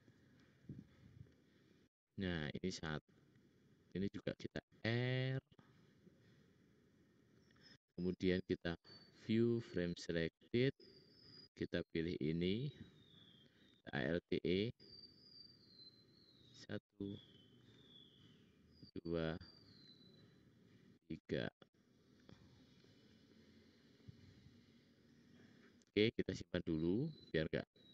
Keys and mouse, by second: 2.9 ctrl+r, 8.8-10.1 middle drag, 12.1 click, 13.8 alt+e, 17.5 alt+e, 19.6 alt+e, 22.3 middle click, 26.4-27.1 drag, 26.4-27.1 middle drag, 26.4-27.1 right drag, 27.8 click, 27.8 middle click, 27.8 right click.